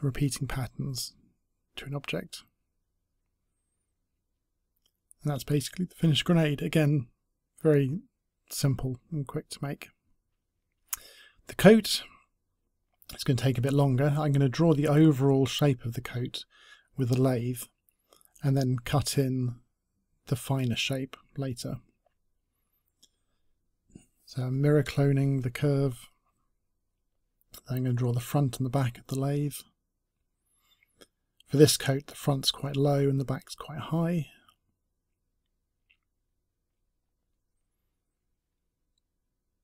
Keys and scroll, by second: 2.7-5.0 typing, 27.8 space.